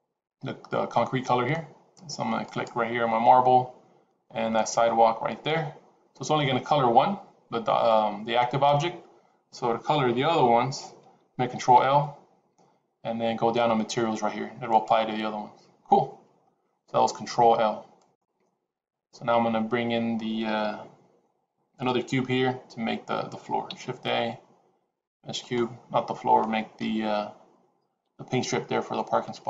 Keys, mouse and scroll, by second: 2.4 click, 11.5 ctrl+l, 17.9 click, 18.7 scroll down 1, 23.6 shift+a, 26.7 KP_7, 27.9 g.